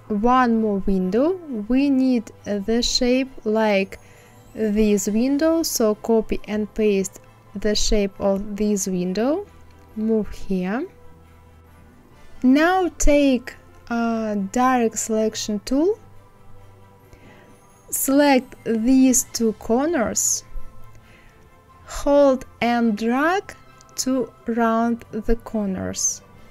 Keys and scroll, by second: 6.4 ctrl+c, 7.2 ctrl+v.